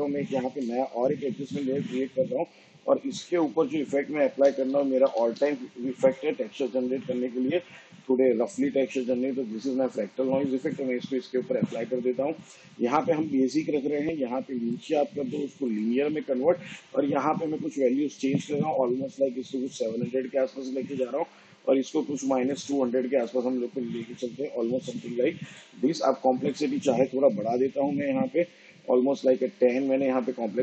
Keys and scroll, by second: 0.4 ctrl+alt+y, 4.2-5.8 typing.